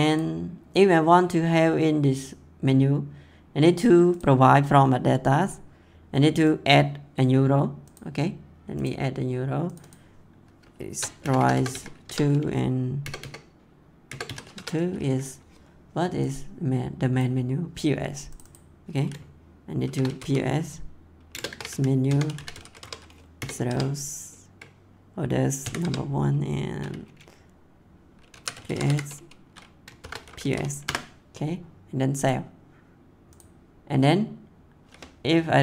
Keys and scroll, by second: 10.5-13.0 typing, 14.5 Tab, 19.6-22.2 typing, 22.7 Tab, 23.3 0, 23.6 Tab, 25.6 1, 25.8 Tab, 28.3 c, 29.7-30.9 typing.